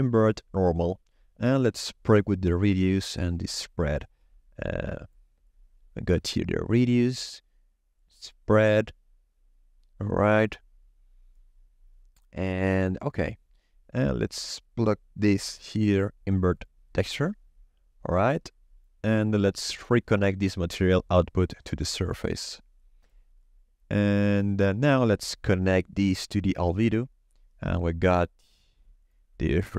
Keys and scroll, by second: 14.1 shift+a, 15.2 i, 15.3 n, 15.4 v.